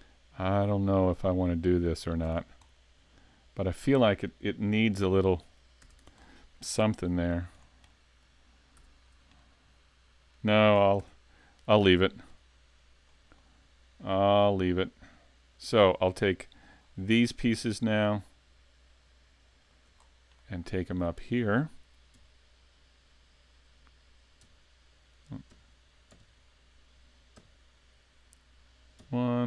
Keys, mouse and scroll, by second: 0.8 alt+shift+right click, 1.5 alt+shift+right click, 2.0 alt+shift+right click, 2.3 scroll down 3, 2.8 middle click, 4.9 scroll up 3, 5.2 middle click, 5.9 a, 6.0 Tab, 6.3 scroll down 4, 7.0 s, 7.6 scroll down 2, 7.9 middle click, 8.8 a, 9.0-9.4 scroll down 2, 9.4 middle click, 11.0 shift+c, 12.3 KP_5, 13.4 middle click, 16.9 scroll up 3, 17.1 shift+middle click, 18.0 shift+right click, 19.6 shift+right click, 20.0-20.3 scroll down 3, 20.4 middle click, 23.4 KP_1, 24.9 KP_1, 25.5 KP_5, 26.1 KP_2, 27.4 KP_5, 29.0 KP_1.